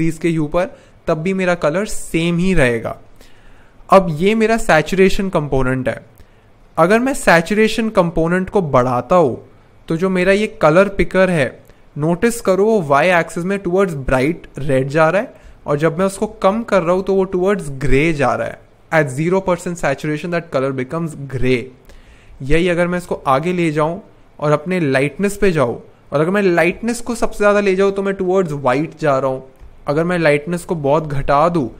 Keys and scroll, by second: 7.4 shift+Page_Up, 7.8 shift+Page_Up, 9.3 shift+Page_Down, 9.8 shift+Page_Down, 9.9 shift+Down, 12.9 shift+Up, 13.4 shift+Up, 13.8 shift+Up, 15.5 shift+Down, 15.7 shift+Down, 16.0 shift+Page_Down, 21.9 shift+Page_Up, 22.1 shift+Page_Up, 22.3 shift+Page_Up, 26.7 shift+Page_Up, 27.1 shift+Page_Up, 27.3 shift+Page_Up, 29.6 shift+Page_Down, 29.9 shift+Page_Down, 30.3 shift+Page_Down.